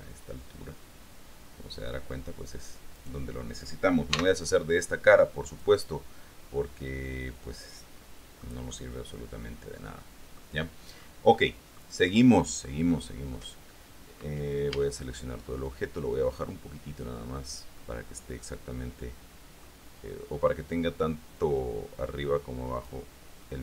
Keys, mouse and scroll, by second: 3.1 right click, 4.3 x, 5.6 click, 6.1-8.8 middle drag, 8.9 middle click, 9.6-10.8 drag, 11.5 middle click, 12.2-12.7 scroll up 1, 12.7 scroll up 1, 14.9 a, 15.8-18.0 drag, 18.0-20.0 middle drag, 21.2-23.2 drag, 23.2-23.6 middle drag.